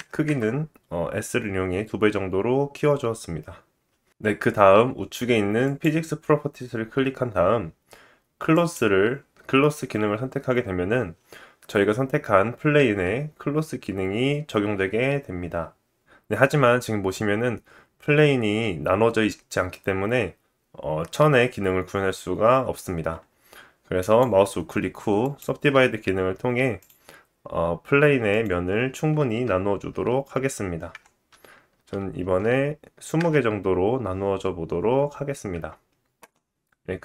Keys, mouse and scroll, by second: 5.6 click, 8.5-24.0 drag, 17.6 Tab, 24.0-26.8 middle drag, 24.0 right click, 26.9-28.3 middle drag, 26.9 right click, 26.9 click, 28.3 click, 35.5 Tab.